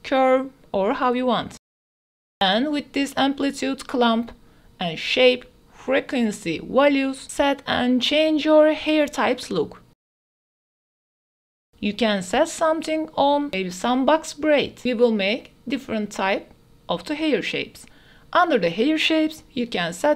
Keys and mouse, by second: 2.5-6.7 drag, 8.9-10.3 drag, 10.7 click, 11.4-12.9 drag, 13.2-14.5 drag, 14.9 ctrl+z, 15.5-16.7 drag, 16.9 click, 18.1 click, 19.9-20.1 drag.